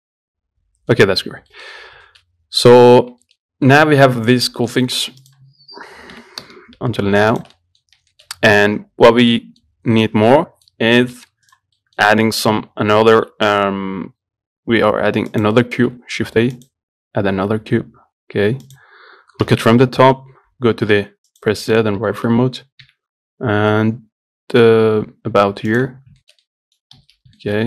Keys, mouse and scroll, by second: 1.5 scroll down 1, 1.8 middle click, 2.0-2.3 scroll up 1, 2.3 shift+middle click, 3.3 scroll up 1, 3.5 shift+middle click, 3.7 scroll down 1, 3.9-5.5 middle drag, 5.5 click, 6.4 g, 7.8 middle click, 8.1 scroll up 2, 8.4-11.2 shift+middle drag, 11.2 scroll down 2, 11.4 middle click, 11.7 click, 12.0 middle click, 12.7-13.4 scroll up 1, 13.4 shift+a, 15.6 click, 16.0 shift+a, 17.5 s, 19.7 KP_7, 20.0-20.3 scroll up 1, 20.3 scroll down 1, 20.7 z, 22.1 scroll down 1, 22.3 shift+middle click, 23.1 g, 26.2 scroll up 5, 26.4 shift+middle click, 27.0 scroll up 1, 27.2 z, 27.6 shift+middle click.